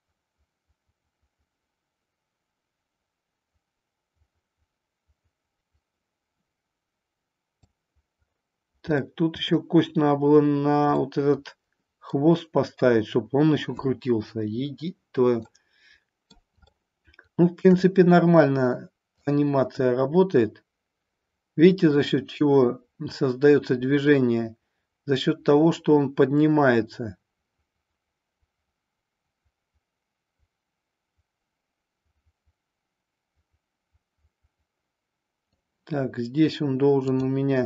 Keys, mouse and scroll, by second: 9.0-9.5 middle drag, 11.0-12.1 middle drag, 15.4-16.4 middle drag, 16.6-17.6 shift+middle drag, 19.1-35.5 drag.